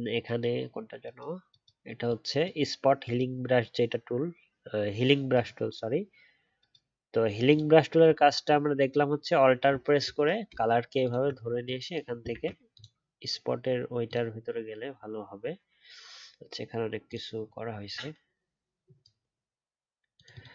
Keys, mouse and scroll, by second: 10.5-11.0 alt+scroll up 1, 11.0 alt+click, 12.3 ctrl+z.